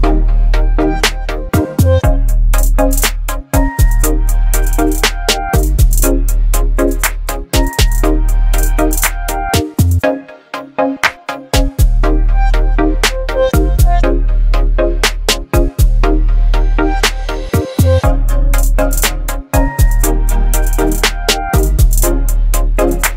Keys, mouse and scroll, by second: 2.8-4.1 alt+drag, 4.4-4.8 alt+scroll down 1, 6.3 click, 9.9 ctrl+0, 12.4-20.0 drag.